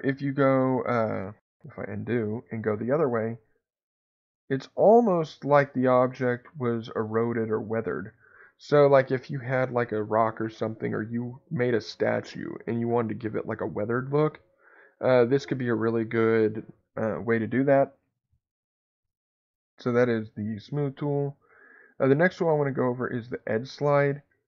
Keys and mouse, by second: 1.9 ctrl+z, 3.6-4.8 drag, 6.5 click, 6.9 click, 7.2 click, 7.7 click, 8.1 click, 20.4 ctrl+z, 23.2 click.